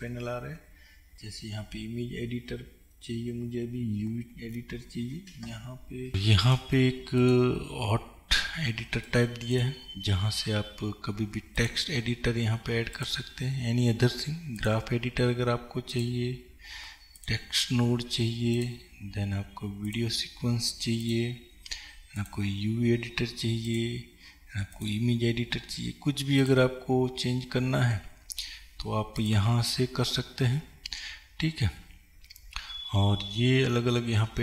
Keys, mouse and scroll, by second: 6.1-34.4 drag.